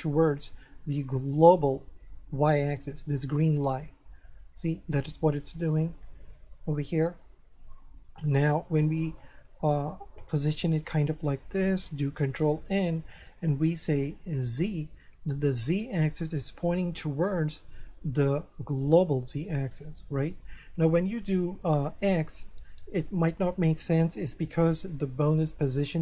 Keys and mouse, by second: 4.9 middle click, 7.9 middle click, 9.5 middle click, 12.4 ctrl+n, 14.4 click, 15.2 middle click, 17.6 middle click, 21.0 ctrl+n, 22.4 click, 23.8 middle click.